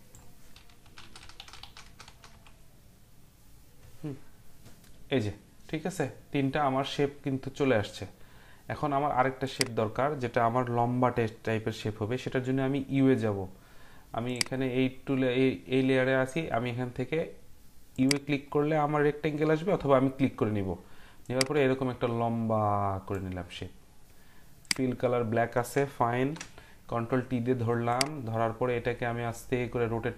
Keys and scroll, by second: 0.8 Down, 1.0 Down, 1.2-2.3 typing, 26.2 ctrl+t.